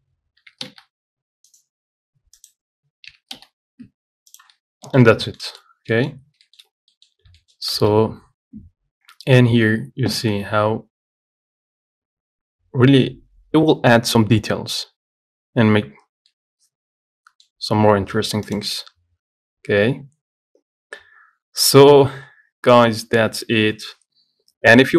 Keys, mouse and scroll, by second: 0.6 g, 2.6 click, 3.4 g, 4.8 scroll down 5, 5.1-6.1 middle drag, 6.1-6.7 scroll up 2, 6.2 middle click, 6.7 shift+middle click, 6.9-7.2 scroll down 2, 7.2 middle click, 7.4 scroll up 1, 7.6 shift+middle click, 8.0 z, 16.6-18.7 middle drag, 18.7 click.